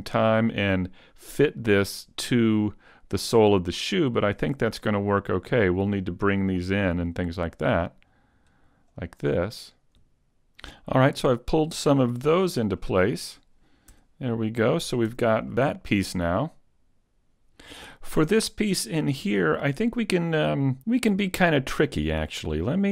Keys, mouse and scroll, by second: 0.0 scroll down 2, 0.0 z, 0.0 a, 1.9-2.4 scroll down 1, 2.4 scroll down 1, 2.5 middle click, 6.0 right click, 8.1 click, 9.7 right click, 10.4 Tab, 10.4 shift+right click, 10.4 scroll down 3, 10.8 middle click, 11.8 scroll down 1, 12.8 middle click, 13.9 Tab, 14.3 middle click, 15.0 a, 15.5 middle click, 16.9 shift+s.